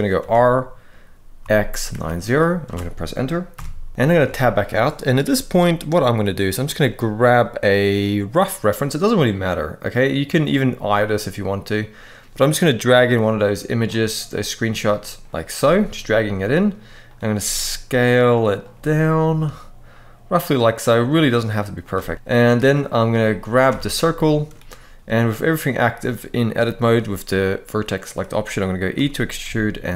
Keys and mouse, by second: 1.1 x, 1.5 9, 1.6 0, 2.3 Return, 3.2 KP_1, 3.9 Tab, 14.7 middle click, 16.8 click, 16.8 g, 17.1 s, 18.3 click, 18.5 g, 23.4 Tab, 24.0 shift+middle click, 28.7 e, 29.1 s.